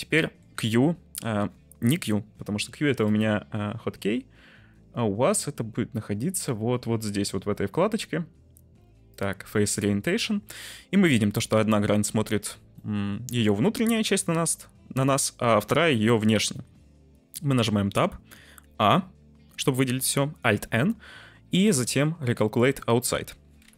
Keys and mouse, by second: 0.2 middle drag, 0.5 q, 1.0 q, 1.0 q, 1.1 q, 2.9-7.6 drag, 9.1-10.3 drag, 12.7-13.5 middle drag, 15.9 click, 17.6 Tab, 18.4 a, 20.4 alt+n.